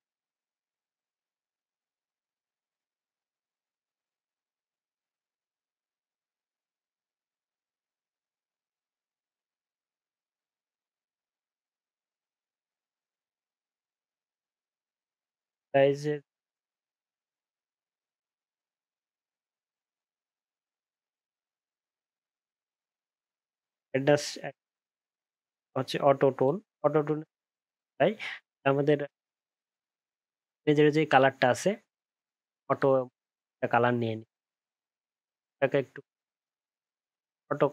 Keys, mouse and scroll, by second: 2.3 alt+scroll up 1, 2.9 alt+scroll down 1, 3.7 ctrl+z, 4.4 ctrl+z, 5.0 ctrl+shift+z, 5.7 ctrl+shift+z, 6.5 ctrl+shift+z, 7.0-8.2 alt+scroll up 9, 15.7 alt+scroll down 1, 16.4 alt+scroll up 6, 16.8-17.8 alt+scroll down 1, 18.7-19.8 alt+scroll up 1, 27.6 alt+scroll up 2, 28.3-29.2 alt+scroll down 5.